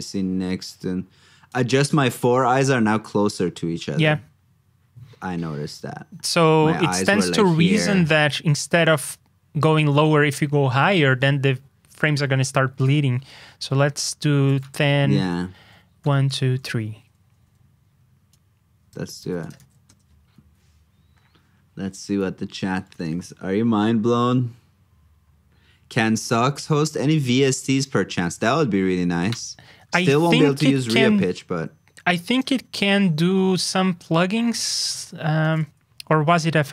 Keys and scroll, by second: 19.2 super+c, 19.5 super+v, 29.9 super+Tab, 34.5 super+f.